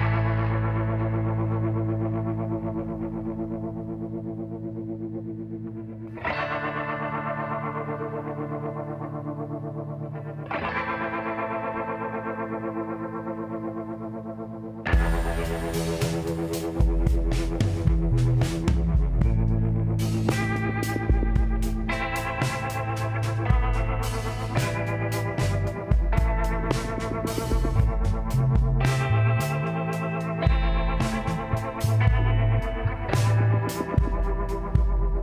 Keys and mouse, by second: 0.4 z, 0.8 middle click, 2.8 f, 4.5 e, 9.2 ctrl+KP_Add, 11.5 click, 12.2-13.5 middle drag, 14.2-18.1 drag, 16.6-18.1 middle drag, 16.8 KP_1, 18.1 e, 26.2-27.4 middle drag, 27.4 t, 28.9-30.5 middle drag, 33.7-35.2 drag, 34.8 x.